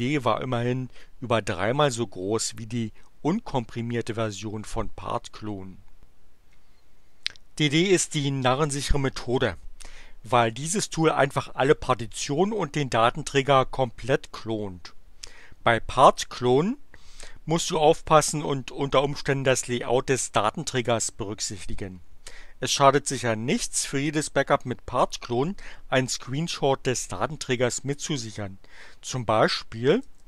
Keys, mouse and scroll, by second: 29.7-30.2 typing.